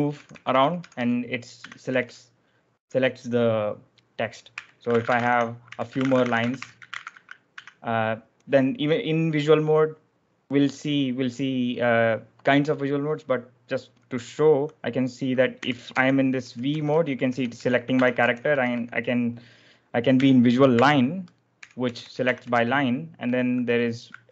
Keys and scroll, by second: 0.0-2.4 typing, 4.2-7.5 typing, 15.2-18.8 typing, 20.6-23.1 typing, 24.2 0.